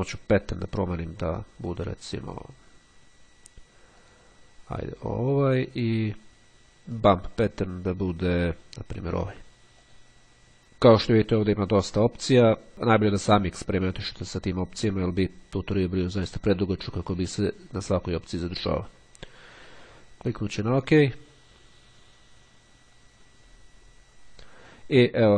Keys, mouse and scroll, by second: 0.0 click, 3.8 click, 5.4 click, 6.8 click, 9.0 click, 10.1 click, 20.0 click.